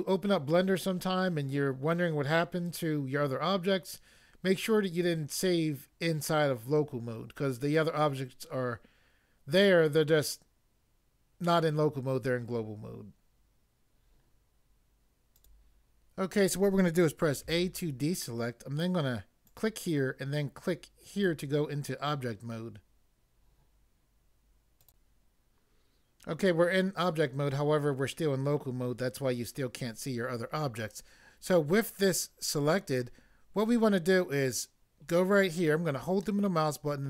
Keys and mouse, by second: 15.4 click, 15.4 click, 17.4 a, 19.5 click, 21.1 click, 24.8 click, 24.9 click, 36.2 middle click.